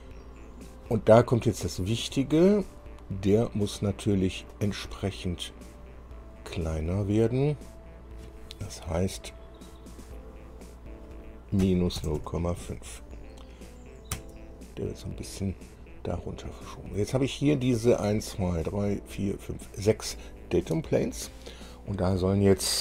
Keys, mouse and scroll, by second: 2.4 click, 7.0 click, 9.7 click, 10.8 click, 11.8 KP_Subtract, 12.2 KP_0, 12.4 KP_Decimal, 14.3 KP_Enter.